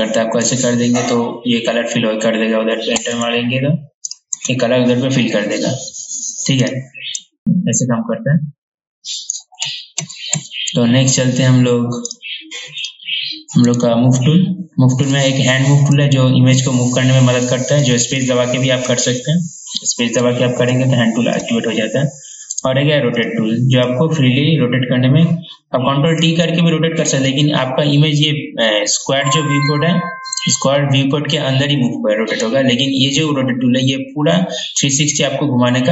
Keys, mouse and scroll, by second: 3.1 Return, 4.3 click, 4.5 Return, 6.7 click, 9.8 ctrl+z, 9.9 ctrl+z, 10.1 ctrl+z, 10.5 ctrl+z, 12.3 click, 13.9 right click, 15.2-21.9 drag, 22.8 right click, 23.4-35.9 drag.